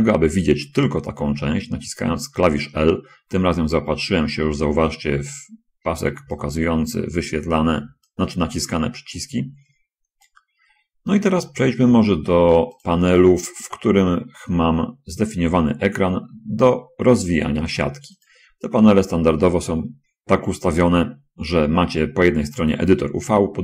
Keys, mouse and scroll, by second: 9.3 alt+click, 9.5 alt+click, 11.9 shift+middle click, 13.2 click, 18.6 click, 22.3 middle click, 22.3-22.7 scroll up 1, 23.3 click.